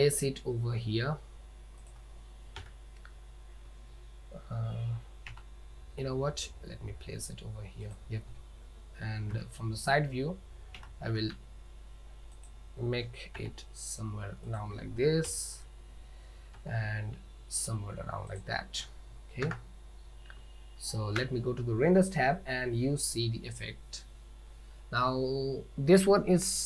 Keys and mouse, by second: 0.0 g, 2.7 KP_7, 5.4 g, 9.4 KP_3, 10.9 g, 13.4 r, 15.3 KP_7, 16.6 r, 19.5 KP_0, 20.4 z, 21.5 click.